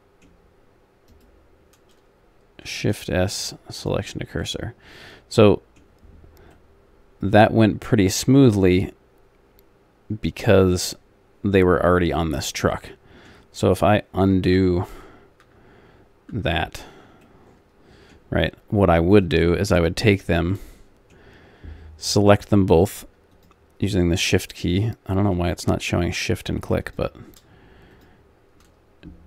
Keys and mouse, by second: 1.1-3.9 right drag, 2.7 shift+s, 4.4 middle click, 5.5-6.8 middle drag, 11.7-12.9 middle drag, 14.7 ctrl+z, 15.6 ctrl+z, 16.5 ctrl+z, 17.2-19.2 middle drag, 19.2 click, 20.5-22.7 middle drag, 22.7-29.2 drag.